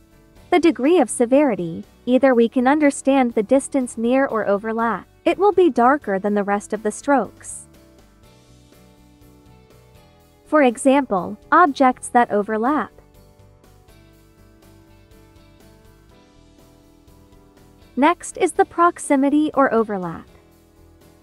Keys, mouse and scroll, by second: 4.0 space, 4.4 click, 4.6 space, 8.6-11.3 drag, 15.9-17.6 drag, 19.8-21.2 drag.